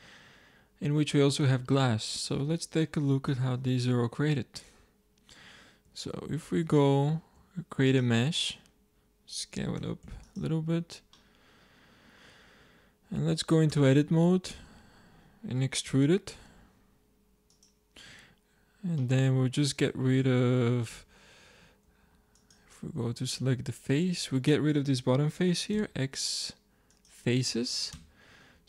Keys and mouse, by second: 3.3 z, 3.8-4.8 middle drag, 4.9-5.8 middle drag, 5.8 z, 6.5 middle click, 7.0 shift+a, 9.7 s, 10.8-13.6 drag, 13.6 Tab, 15.8 e, 18.9 click, 19.5 click, 20.0 click, 20.8 z, 21.8 ctrl+Tab, 23.6-24.8 drag, 25.6 x, 27.8 Tab, 28.5 z.